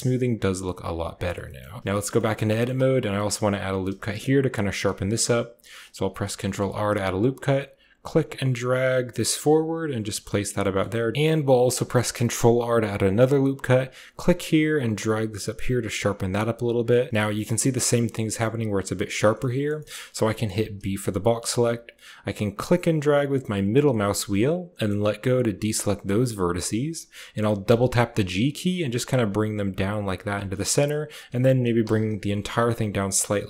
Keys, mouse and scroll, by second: 1.3 shift+drag, 1.6 shift+drag, 2.0 click, 2.4 shift+click, 3.0 click, 3.8 shift+click, 4.8 shift+click, 5.8 ctrl+r, 9.9 Tab, 10.2-10.6 drag, 11.1 ctrl+z, 11.6 ctrl+r, 16.8 click, 19.2 shift+click, 19.7 click, 20.1 shift+click, 20.6 b, 27.5 g, 30.4 click, 31.1 g.